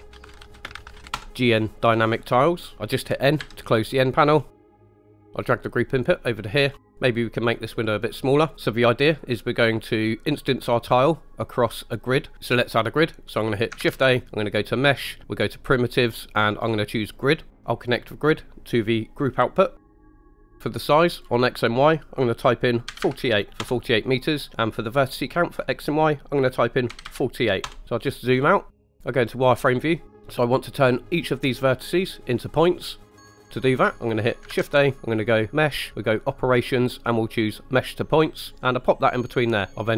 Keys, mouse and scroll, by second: 3.4 n, 4.3-4.8 scroll up 4, 4.5 middle click, 4.9 middle click, 5.3 scroll up 1, 5.4-6.7 drag, 6.9 click, 13.8 shift+a, 18.0-19.7 drag, 20.1-24.5 drag, 25.0-27.7 drag, 27.8 scroll down 4, 28.0-28.6 scroll down 4, 29.4 click, 29.9 middle click, 30.1 scroll up 2, 33.5 click, 34.5 shift+a, 39.5 click.